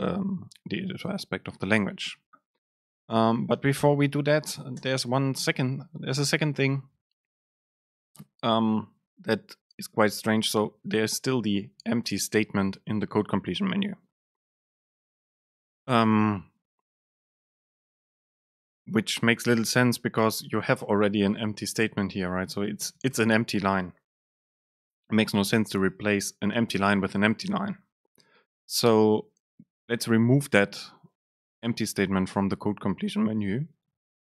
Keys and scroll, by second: 5.0 super+space, 22.9 Return.